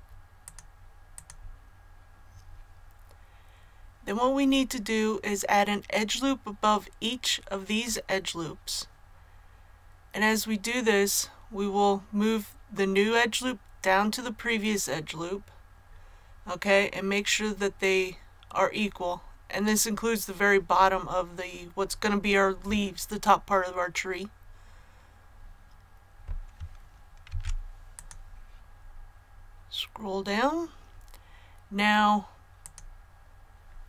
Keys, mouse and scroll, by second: 0.4 click, 22.9-23.2 scroll up 1, 27.2 ctrl+r, 27.9-29.0 drag.